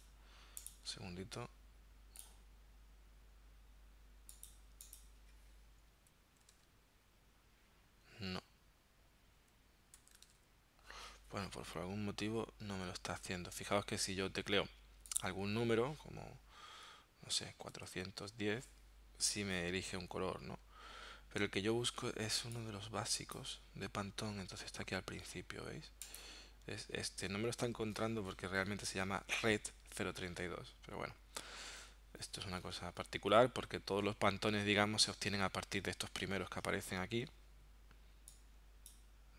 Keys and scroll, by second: 6.5 typing, 9.9-10.7 typing, 17.8 4, 18.1 1, 18.3 0.